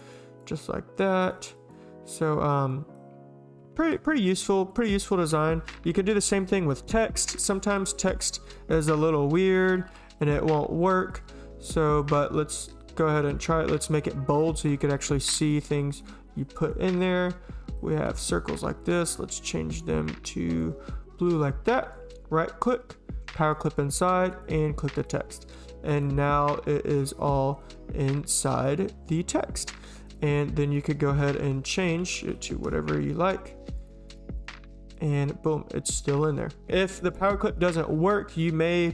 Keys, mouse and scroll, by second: 0.1 click, 1.2 click, 1.4 click, 1.5 click, 2.7 click, 4.4 click, 4.7 click, 5.0 click, 8.0 click, 8.4 click, 9.3-10.7 typing, 11.1 click, 12.0 click, 13.0 click, 13.9 click, 17.2 click, 18.8 click, 19.4 shift+click, 19.7 shift+click, 20.5 click, 21.8 right click, 23.5 click, 31.4-32.8 typing.